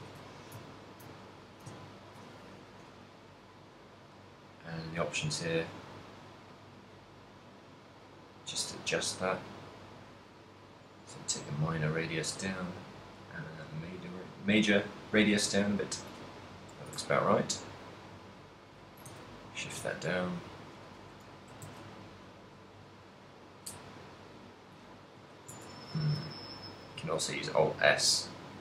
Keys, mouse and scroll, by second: 0.1 z, 0.3 shift+middle click, 0.8 ctrl+middle click, 2.0 ctrl+middle click, 3.9 middle click, 5.8 click, 7.4 middle click, 9.6 click, 13.1 click, 16.8 g, 19.2 shift+click, 19.2 a, 19.9 z, 20.2 right click, 21.5 s, 22.8 right click, 22.9 s, 24.5 right click, 25.3 z, 25.7 Tab, 26.0 alt+s.